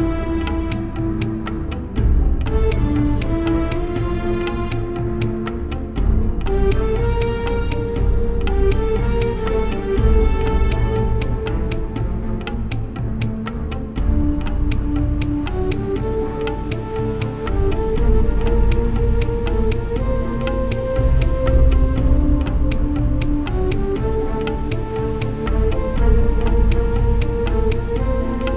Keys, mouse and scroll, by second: 3.3-5.2 right drag, 5.7-7.5 right drag, 7.0-9.2 middle drag, 8.2-10.1 right drag, 9.5 middle click, 10.1-11.7 middle drag, 11.7 ctrl+Up, 13.6-16.8 middle drag, 16.2-18.3 right drag, 16.9 middle click, 17.3-18.6 middle drag, 18.6-20.3 right drag, 19.8-22.8 middle drag, 20.3 click, 20.5 right click, 22.0-24.2 right drag, 23.0-24.8 middle drag, 23.7 click, 25.5-28.5 middle drag, 25.5-27.6 right drag.